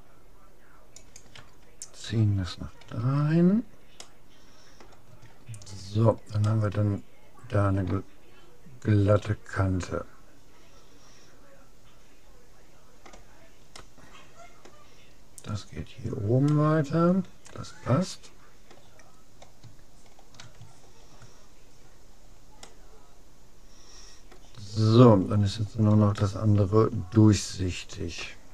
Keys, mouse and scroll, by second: 2.9 a, 3.2-6.3 middle drag, 7.1 middle click, 7.3-8.3 middle drag, 13.9-15.5 middle drag, 16.5-18.3 middle drag, 19.1 middle click, 20.1-20.8 scroll up 1, 20.8 scroll down 1, 21.0-22.1 middle drag, 22.7-24.3 middle drag, 24.8 scroll up 1, 25.1-26.1 middle drag, 26.1 scroll up 1, 26.3-27.9 middle drag.